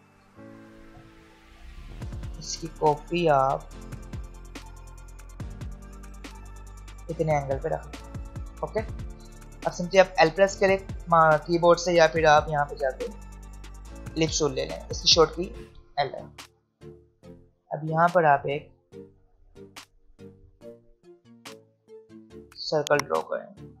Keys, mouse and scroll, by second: 3.6 right click, 4.9 click, 6.0 l, 12.4-16.7 alt+shift+drag, 16.7 v, 17.2 click, 18.0 alt+scroll up 1, 21.5-23.8 drag.